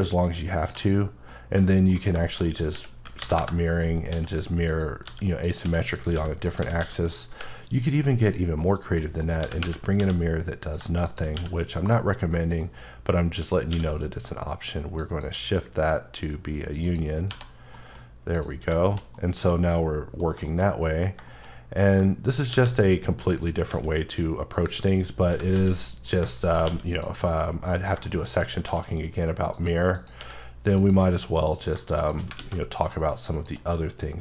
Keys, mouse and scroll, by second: 0.2 click, 0.8 double click, 1.3 middle click, 2.0 alt+scroll down 1, 2.3 shift+middle click, 2.7-6.8 typing, 3.4 KP_Enter, 4.7 click, 5.4 click, 5.9 click, 6.5 click, 8.3 click, 8.6 KP_Decimal, 8.9 middle click, 9.3 scroll, 9.4 g, 10.0 x, 10.6 click, 11.7 click, 12.1 scroll down 1, 12.3 middle click, 13.1-13.7 scroll up 1, 13.7 q, 15.0 click, 15.8-16.2 scroll down 1, 16.7 scroll down 1, 16.8 click, 17.3 1, 17.6-18.3 scroll down 2, 17.7 middle click, 18.3 click, 18.6 scroll down 1, 18.8 middle click, 19.2 double middle click, 20.5 shift+middle click, 20.7-21.3 scroll up 3, 21.3 shift+middle click, 22.3 right click, 22.5 a, 23.3 click, 23.7 s, 24.6 click, 25.3 g, 25.5 z, 26.1 click, 26.6 q, 27.0 click, 27.5 middle click, 27.8 scroll down 1, 28.0 shift+middle click, 28.7 q, 29.5 click, 29.9 click, 30.2 q, 30.8 click, 31.2 scroll down 1, 31.5 click, 32.4 alt+x, 33.6 click.